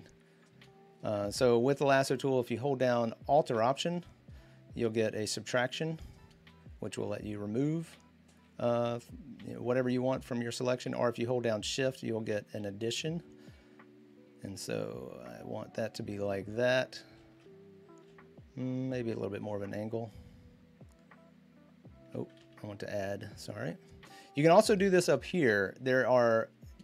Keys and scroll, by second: 22.2 ctrl+z.